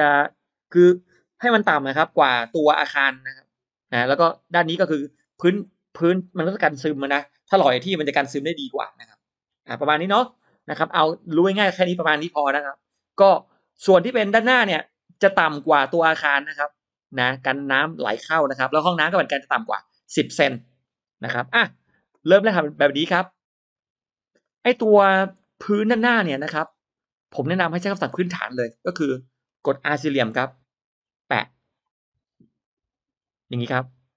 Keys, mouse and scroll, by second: 16.2-17.6 shift+drag, 21.2 shift+right click, 22.2 drag, 23.0-23.3 scroll up 1, 24.2-25.2 scroll up 1, 24.3 middle click, 25.2-26.1 scroll up 1, 25.3 middle click, 26.6 scroll down 1, 26.9 middle click, 27.4-28.0 scroll up 2, 28.8 middle click, 28.8 scroll up 1, 30.3 r, 32.5 click.